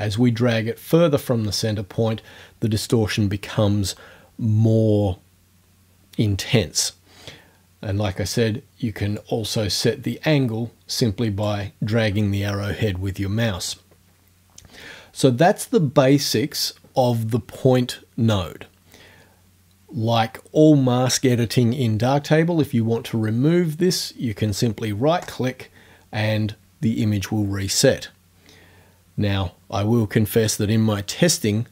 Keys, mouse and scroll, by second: 9.2-11.6 drag, 25.2 right click.